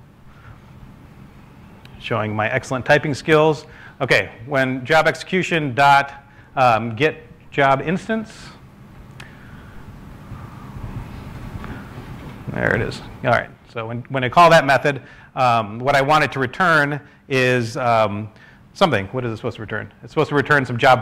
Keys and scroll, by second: 13.1 s.